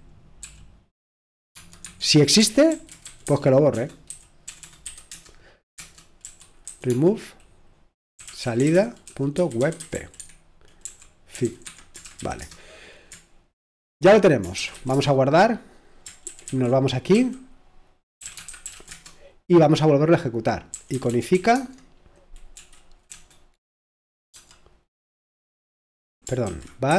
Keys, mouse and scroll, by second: 0.0-7.1 typing, 1.8 Escape, 8.6 Return, 8.8-12.9 typing, 14.3-17.1 typing, 18.2 c, 18.7 ctrl+w, 18.9 c, 20.5-24.3 typing, 26.4-26.9 typing.